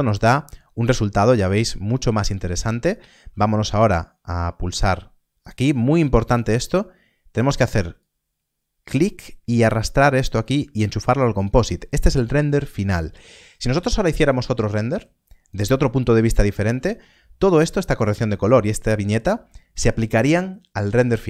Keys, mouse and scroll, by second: 0.0 scroll up 1, 4.7 click, 5.7-6.1 scroll up 1, 6.1 middle click, 8.0 click, 12.8 middle click, 13.2 scroll down 1, 14.9 click.